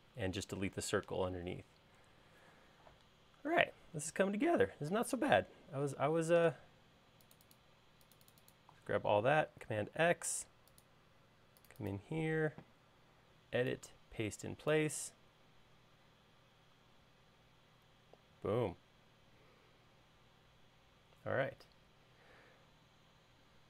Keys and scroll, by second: 10.0 super+x.